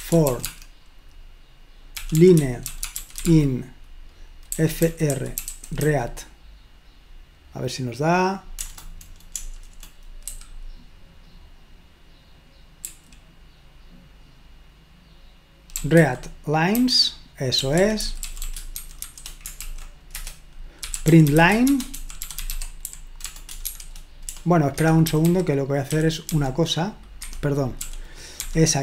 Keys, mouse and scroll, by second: 0.0-6.3 typing, 8.6 BackSpace, 9.5 BackSpace, 9.7 BackSpace, 10.2 ., 12.9 typing, 15.5-26.3 typing, 27.3 Escape, 27.8-28.4 typing.